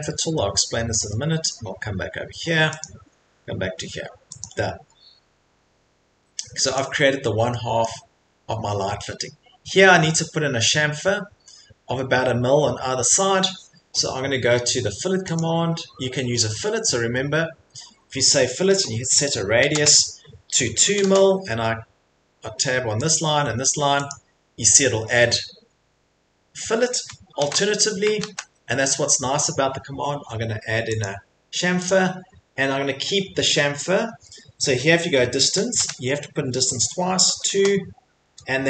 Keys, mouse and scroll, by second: 0.0-1.0 scroll, 1.5 middle click, 2.8 click, 2.8-3.3 scroll, 4.4 click, 5.5 Escape, 6.1 Escape, 6.5 middle click, 6.7 click, 7.0 middle click, 7.1 middle click, 7.8 middle click, 8.4 middle click, 8.5 middle click, 8.6 middle click, 8.7 Escape, 9.0 middle click, 9.5 middle click, 11.4 middle click, 11.9 middle click, 12.0 middle click, 13.3 middle click, 15.3 click, 19.5 click, 19.6 r, 20.8 2, 21.0 Return, 23.1 click, 24.1 Return, 24.6 click, 24.6 middle click, 24.7 middle click, 25.6 middle click, 25.6 middle click, 27.4 ctrl+z, 29.8 ctrl+z, 31.0 click, 31.8 click, 35.3 d, 37.2 2, 37.5 Return.